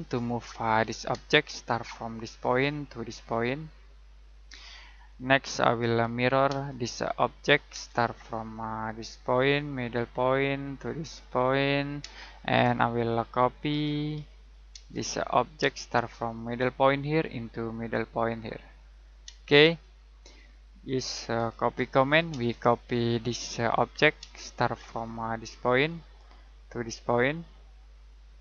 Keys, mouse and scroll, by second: 0.3 click, 1.1 space, 2.2 click, 4.9 middle click, 6.5 space, 6.7 click, 7.7 space, 10.2 click, 12.0 space, 13.7-15.6 typing, 14.9 click, 16.8 click, 19.2 space, 19.8 middle click, 21.3-22.3 typing, 23.2 click, 24.2 space, 25.7 click.